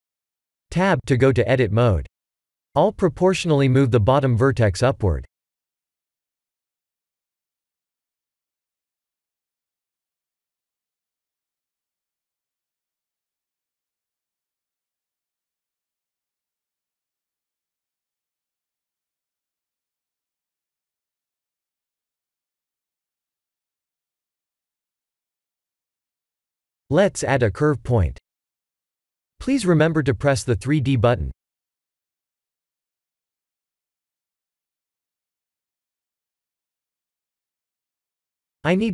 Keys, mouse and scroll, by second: 0.7 Tab, 1.0 1, 1.6 click, 4.1 click, 4.7 g, 13.4 middle click, 19.0 middle click, 19.4 middle click, 19.7 middle click, 20.1 Tab, 20.9 middle click, 21.0 middle click, 21.2 middle click, 21.5 middle click, 21.7 r, 23.3 KP_1, 24.8 click, 27.3 shift+a, 34.3 click, 35.5 click, 36.6 click, 37.6 Tab, 38.7-38.9 scroll up 3.